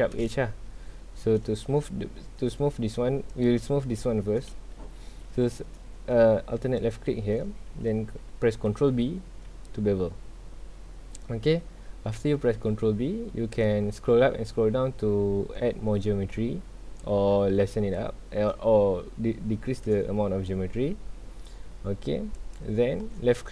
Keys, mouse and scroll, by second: 0.7-3.3 shift+middle drag, 3.3 alt+click, 6.8 alt+click, 8.7 ctrl+b.